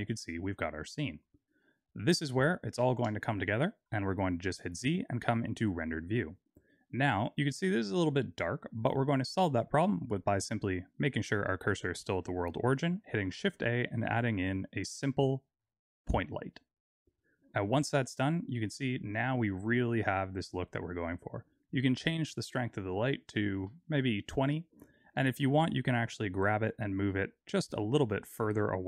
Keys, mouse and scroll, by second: 4.0 z, 13.4 shift+a, 22.2 click, 25.4 middle click, 27.4 g.